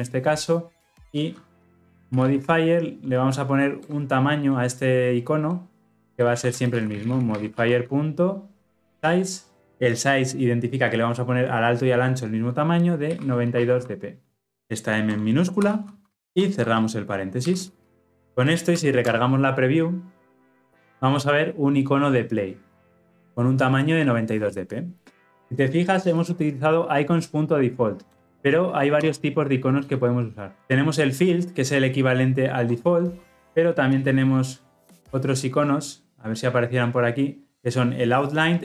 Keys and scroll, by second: 3.8 Return, 9.6 Return, 16.2 ctrl+alt+o, 30.2 ctrl+space, 35.2 ctrl+space.